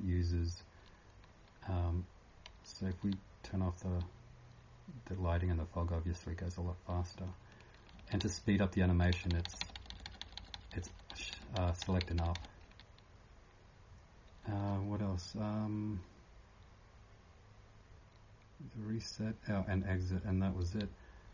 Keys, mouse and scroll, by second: 3.0 r, 7.3 n.